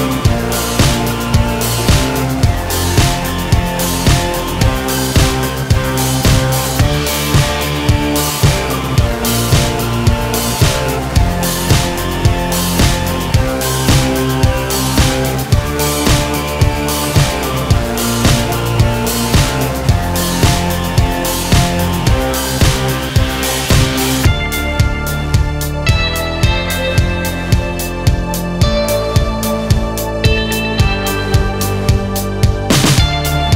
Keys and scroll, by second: 9.4 ctrl+z, 18.4 ctrl+r, 22.1 ctrl+a, 29.0 ctrl+a.